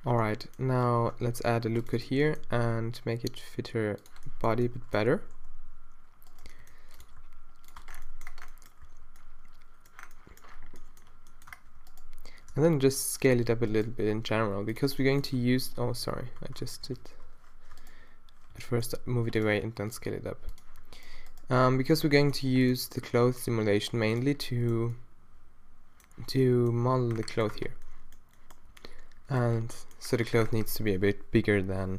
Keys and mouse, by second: 0.0 Tab, 0.9 Tab, 1.3 ctrl+r, 2.1 g, 5.2 s, 6.5 g, 7.1 s, 7.8 Tab, 8.0 middle click, 8.9 a, 11.6 Tab, 12.5 s, 14.2 s, 15.1 click, 15.5 z, 16.0 z, 16.2 z, 16.7 shift+z, 18.5 g, 19.7 s, 22.6 g, 22.7 s, 27.6 Tab.